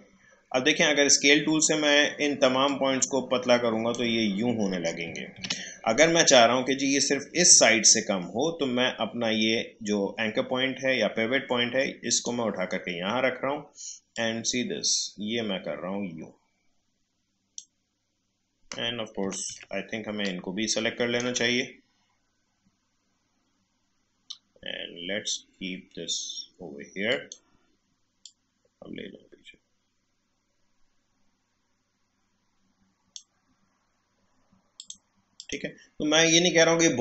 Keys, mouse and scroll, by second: 2.6-5.3 drag, 5.3 ctrl+z, 12.1-19.5 drag, 19.5 ctrl+z, 20.2-23.5 ctrl+drag, 27.1-34.8 drag.